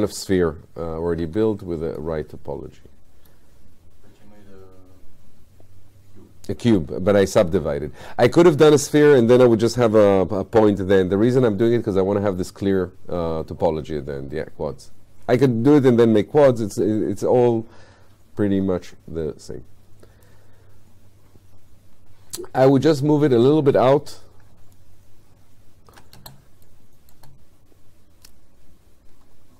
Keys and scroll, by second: 1.2 w.